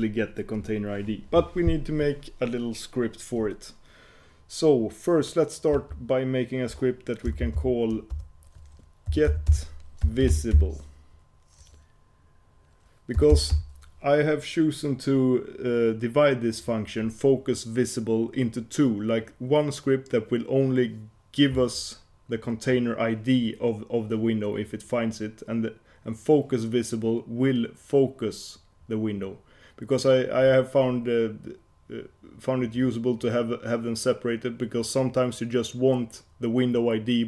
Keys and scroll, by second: 6.0 F8.